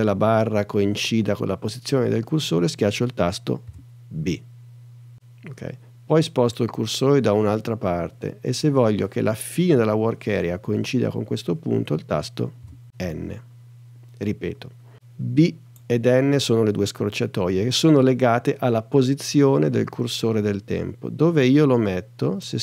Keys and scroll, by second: 3.7 b, 12.6 n.